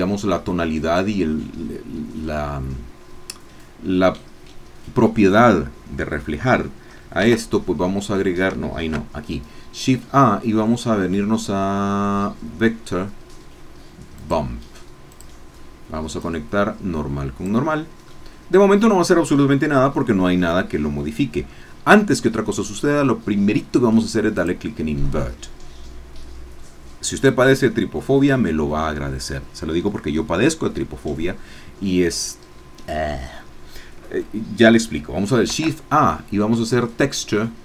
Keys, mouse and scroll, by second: 7.2 shift+a, 8.8 shift+a, 14.1 click, 15.1-18.3 drag, 18.3-23.5 middle drag, 24.3 click, 35.4 shift+a.